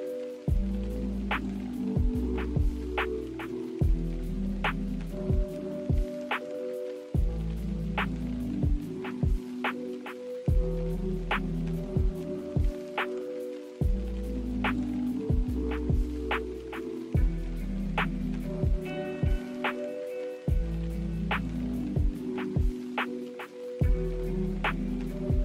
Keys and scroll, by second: 5.5 s, 12.9 n.